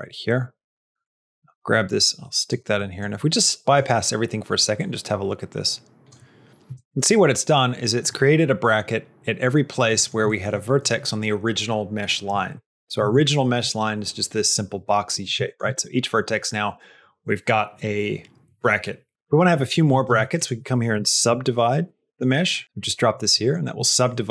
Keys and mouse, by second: 0.9-2.4 drag, 2.7 middle click, 3.2 click, 4.6-5.9 drag, 6.7 shift+middle click, 7.1 middle click, 9.7 middle click, 10.1 shift+middle click, 12.9 Tab, 15.3 shift+middle click, 19.9 shift+a, 23.2 middle click, 23.7 shift+middle click, 24.2 middle click.